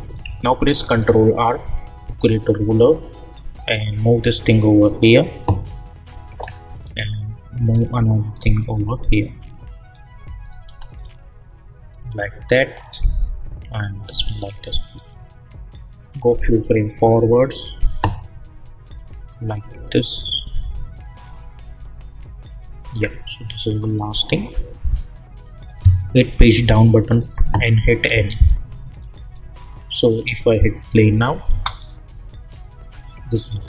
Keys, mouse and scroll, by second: 0.0 click, 0.8 ctrl+r, 2.8-10.4 drag, 10.4-11.1 alt+scroll up 1, 11.9-26.1 drag, 26.6 Page_Down, 28.1 n, 29.0 click, 31.5 space.